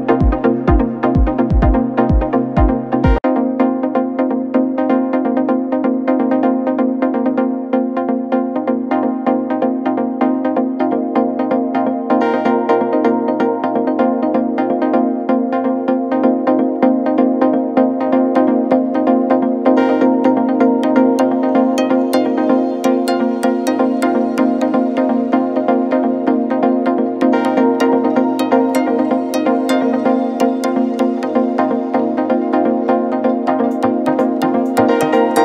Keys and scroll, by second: 8.8 v, 29.8 ctrl+shift+g, 32.2 shift+b, 32.5 g, 33.2 Return.